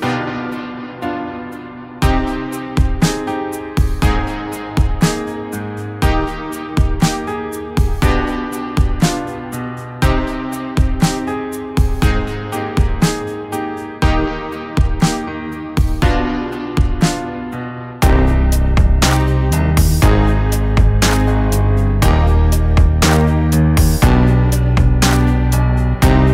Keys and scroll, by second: 2.5 ctrl+=, 3.9 ctrl+-, 22.9-24.2 typing.